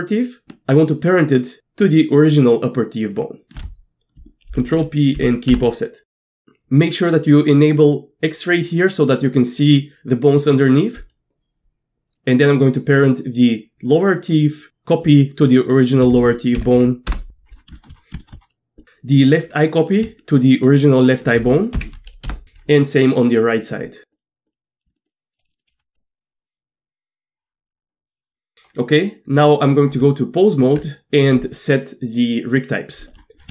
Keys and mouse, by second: 0.1 click, 4.5 ctrl+p, 8.7 click, 11.1-14.6 drag, 15.5 shift+click, 16.6 ctrl+p, 17.7 shift+click, 18.2 shift+click, 21.7 ctrl+p, 24.5 click, 25.1 shift+click, 25.7 ctrl+p, 28.1 middle click, 30.0 Tab.